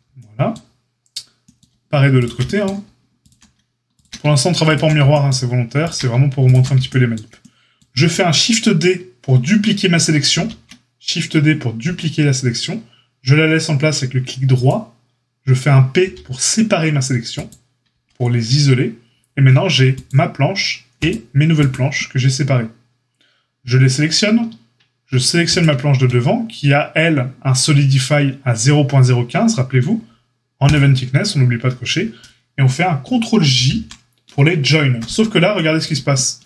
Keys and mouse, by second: 2.1 shift+click, 2.2-3.2 shift+middle drag, 3.2 ctrl+click, 3.2-5.7 ctrl+shift+middle drag, 5.7 shift+click, 5.8-19.9 ctrl+shift+middle drag, 10.3 shift+d, 16.0 p, 17.9 Tab, 19.9 click, 20.0-21.5 middle drag, 21.5 click, 21.7-25.4 middle drag, 25.4 shift+click, 25.6-30.6 shift+middle drag, 30.6 click, 30.7-36.4 middle drag, 33.5 ctrl+j.